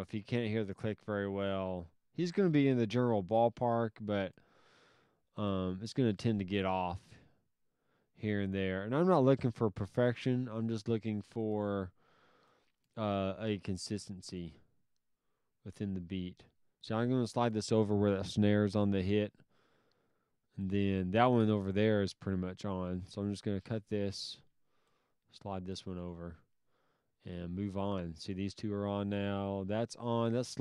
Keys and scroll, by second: 5.6 alt+s, 11.6 alt+s, 22.8 s.